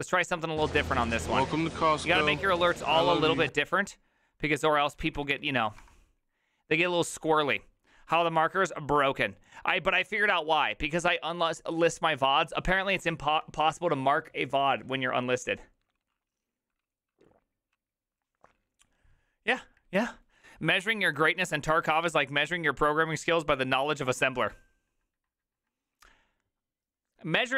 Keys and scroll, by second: 3.6 ctrl+x, 3.6 ctrl+v, 3.6 space, 4.5 Left, 5.1 ctrl+shift+Left, 5.8 BackSpace.